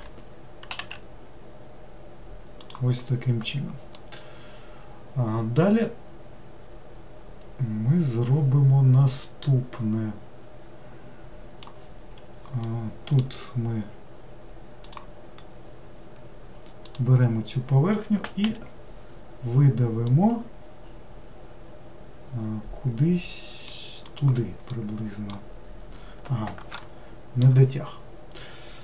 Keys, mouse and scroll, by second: 0.0 s, 3.4-4.0 scroll down 1, 4.0-7.1 middle drag, 12.7-14.9 middle drag, 14.9 click, 15.6-16.9 scroll up 2, 16.9 click, 18.5 e, 24.7-28.8 middle drag.